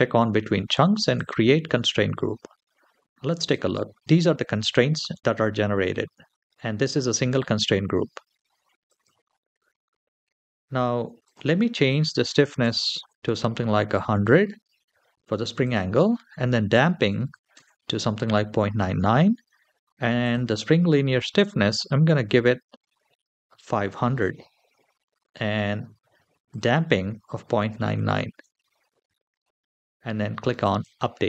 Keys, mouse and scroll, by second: 0.9 click, 3.3 click, 8.7 click, 9.4-10.9 scroll down 5, 11.0-12.8 drag, 12.5 KP_0, 15.4-17.4 drag, 17.0 KP_9, 20.0-23.3 drag, 23.0 KP_0, 26.3-28.1 drag, 27.6 KP_9, 29.4-30.4 scroll down 1, 30.4 click, 30.4 scroll down 2.